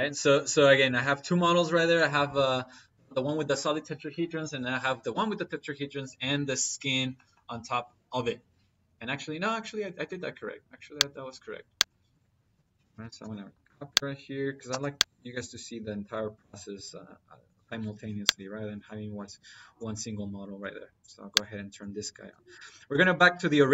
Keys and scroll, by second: 11.8 Escape, 12.4 c, 12.9 p, 13.0 y, 13.1 space, 14.5 space.